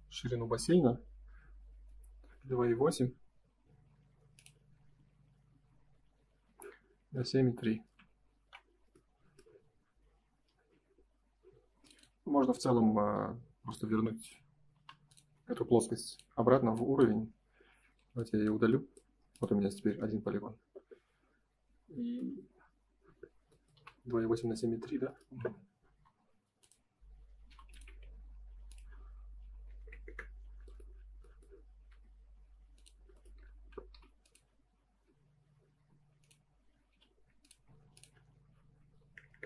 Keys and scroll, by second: 2.4 Escape, 6.4 Escape, 7.9 alt+Tab, 19.2 space, 25.9 space, 27.4 m, 30.0 Return, 31.8 space, 33.9 m, 35.4 Escape, 35.7 space, 36.9 m, 39.3 Return.